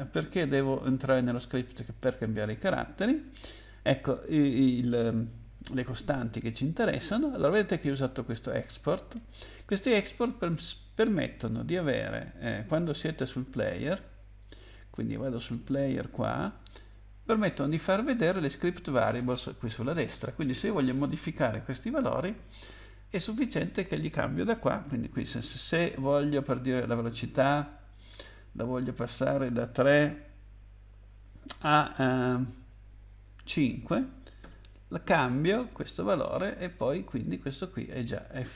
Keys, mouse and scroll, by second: 0.8-1.2 scroll up 8, 12.4 click, 14.4 click, 16.0 click, 22.8 click, 27.1 click, 33.5 5, 34.4 Tab, 37.3 click.